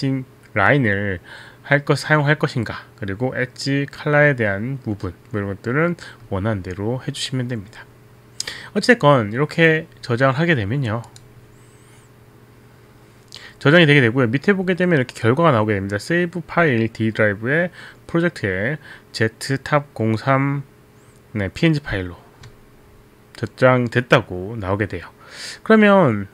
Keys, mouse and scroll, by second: 11.1 click.